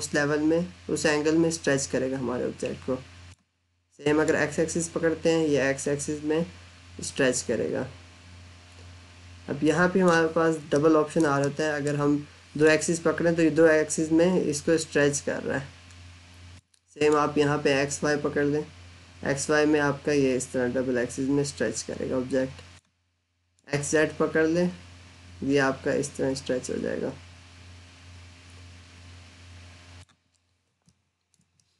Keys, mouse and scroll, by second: 10.6 middle click, 11.2 middle click, 12.5 click, 30.9 alt+middle click, 31.5 middle click.